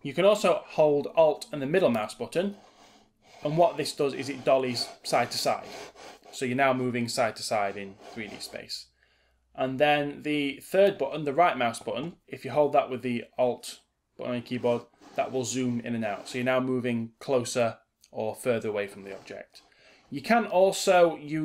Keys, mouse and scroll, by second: 2.1-10.8 alt+middle drag, 12.3-21.4 alt+right drag.